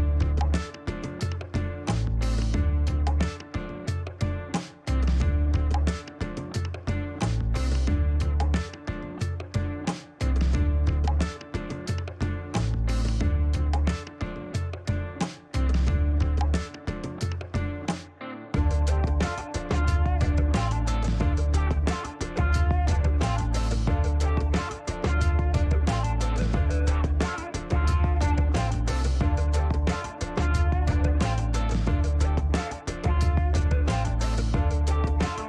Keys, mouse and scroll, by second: 1.5 click, 2.9 click, 3.5 click, 4.9 click, 5.8 scroll down 1, 7.3 shift+right click, 9.7 scroll down 2, 10.2 click, 12.4 click, 16.4 click, 17.4 click, 20.3 click, 20.7 click, 21.1 click, 21.4 click, 25.1 click, 27.4 scroll down 2, 28.1 middle click, 29.9 click, 32.0 click, 33.1 middle click, 33.8 middle click.